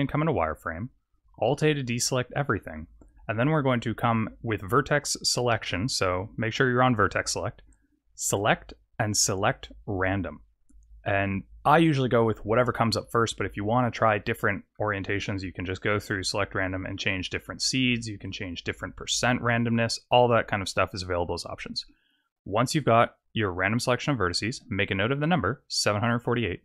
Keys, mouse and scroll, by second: 1.5 alt+a, 2.5 middle click, 8.2 click, 14.0 middle click, 16.0 click, 17.3 click, 18.2 click.